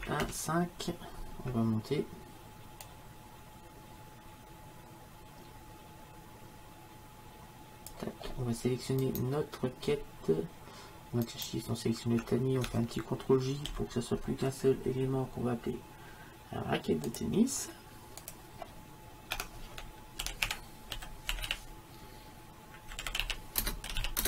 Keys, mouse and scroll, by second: 0.0 KP_1, 0.2 KP_5, 3.7-4.7 drag, 9.1-13.2 drag, 13.9 ctrl+j, 17.1-20.1 drag, 23.1 t.